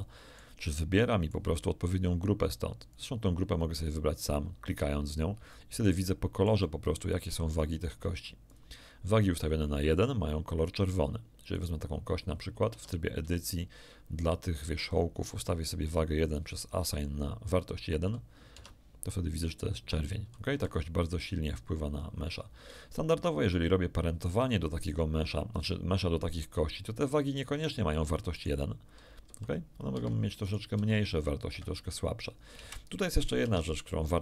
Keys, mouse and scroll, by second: 2.9 click, 3.8 click, 4.6 click, 5.5 shift+middle click, 6.2 shift+middle click, 8.4 click, 9.3 click, 11.5 right click, 12.6 Tab, 16.2 click, 18.5 Tab, 20.5 r, 22.5 Escape, 23.2 scroll down 1, 23.6 shift+middle click, 27.6 click, 28.3 click, 29.2 r, 29.9 Escape, 30.4 click, 30.7 r, 31.4 Escape, 32.6 KP_1, 33.4 Tab.